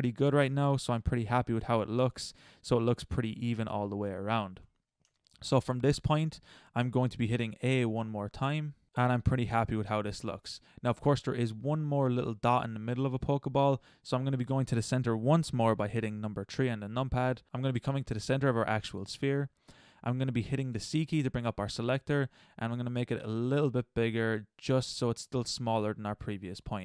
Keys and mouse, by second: 1.3 middle click, 2.6-3.9 middle drag, 4.7 middle click, 5.6 middle click, 5.8 middle click, 8.0 a, 11.1 middle drag, 11.9-12.4 middle drag, 15.9 KP_3, 20.7 c, 26.5 middle click.